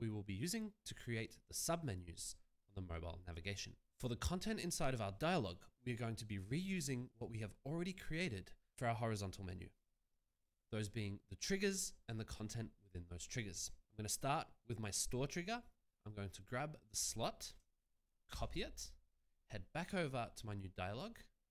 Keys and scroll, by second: 18.7 ctrl+c.